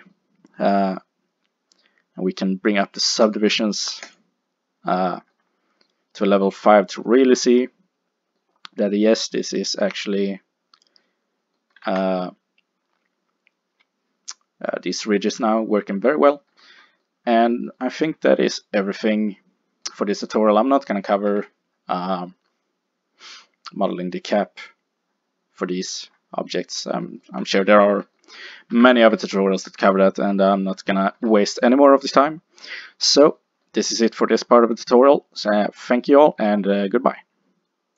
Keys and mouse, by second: 3.2 click, 5.9 middle click, 7.5 middle click, 11.5 middle click, 11.9 a, 15.1-20.5 middle drag, 21.5 Tab, 29.1 Tab, 32.9 middle click, 35.1 middle click.